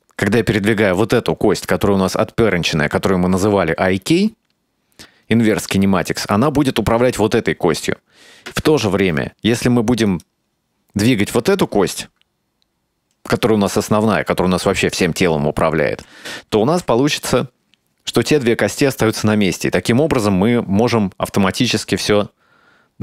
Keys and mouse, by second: 0.0 ctrl+z, 1.1-6.6 right drag, 8.8 ctrl+z, 10.2 right click, 16.8 g.